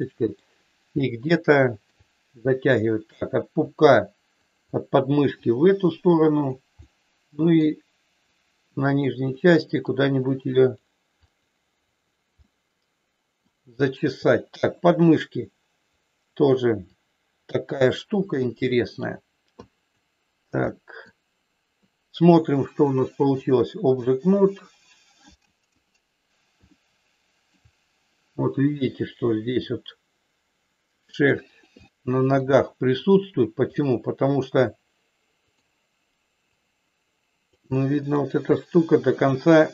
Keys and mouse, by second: 0.0 middle click, 1.5 shift+middle click, 2.7 click, 3.6 click, 4.4 click, 5.4 click, 6.1 click, 6.9 middle click, 8.4 click, 9.4 middle click, 10.6 click, 11.1 click, 11.9 click, 12.4-13.4 middle drag, 13.9 shift+middle click, 15.1 click, 16.9 click, 18.7 shift+middle click, 19.5 click, 20.6 middle click, 22.9 click, 25.6 KP_1, 26.6 shift+middle click, 29.2 shift+middle click, 31.1 middle click, 31.9 shift+middle click, 33.6-35.7 drag, 36.5-37.5 drag, 37.7 middle click, 39.2-39.7 drag.